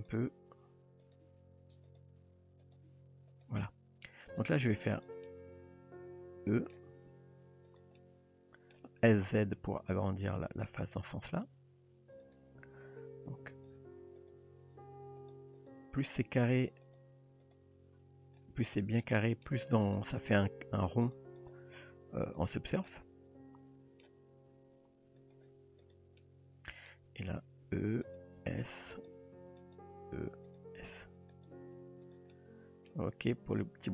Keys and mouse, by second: 0.0 click, 0.5 r, 1.3 g, 2.2 r, 2.8 g, 4.3 click, 4.9 click, 5.3-6.8 middle drag, 7.1 e, 8.0 middle click, 9.0 s, 11.6 r, 13.6 click, 14.3 click, 14.8 g, 15.6 click, 16.3 g, 17.4 click, 18.7 middle click, 19.2 shift+middle click, 19.9 click, 20.3 g, 21.5 click, 21.9 g, 22.9-24.0 middle drag, 25.2 click, 25.9 click, 26.2 middle click, 27.8-31.5 typing, 32.3-32.9 middle drag, 33.6 Tab.